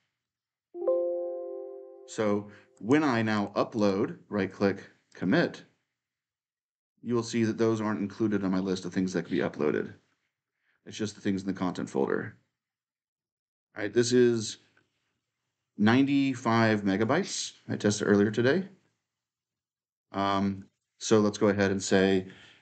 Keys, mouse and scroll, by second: 0.0 click, 2.5 click, 3.5 right click, 4.9 click, 8.5-12.4 middle drag, 8.5-9.8 scroll, 12.4-16.2 scroll up 2, 21.4 click, 22.4-22.6 typing.